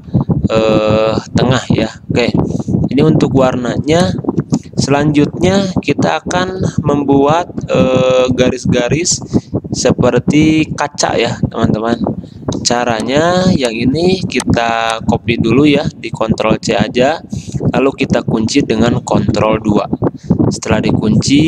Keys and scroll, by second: 3.7 space, 12.8 space, 15.6 ctrl+z, 16.8 ctrl+c, 19.5 ctrl+2.